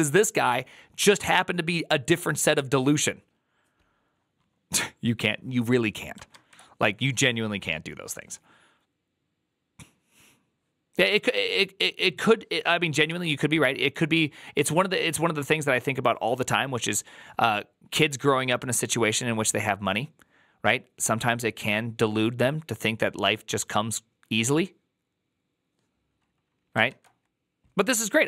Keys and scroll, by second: 12.9 alt+[, 26.7 alt++.